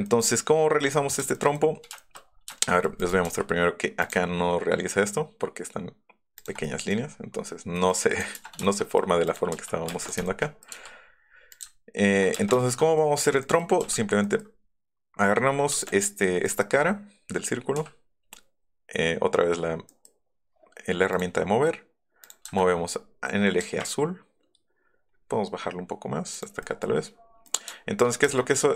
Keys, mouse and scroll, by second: 0.0 click, 1.3 shift+click, 1.9 shift+middle click, 2.5 shift+middle click, 3.0 click, 3.2 s, 4.0 click, 6.4 ctrl+click, 6.9 middle click, 7.9 middle click, 9.2 click, 9.9 space, 11.2 [, 12.3 space, 12.6 shift+middle click, 13.4 scroll up 1, 13.7 m, 14.5 scroll up 2, 15.7 space, 15.8 click, 16.4 click, 17.7 m, 19.9 click, 20.4 middle click, 21.1 click, 22.2 click, 23.6 Up, 26.3 click, 26.6 middle click, 28.0-28.7 middle drag, 28.3 space.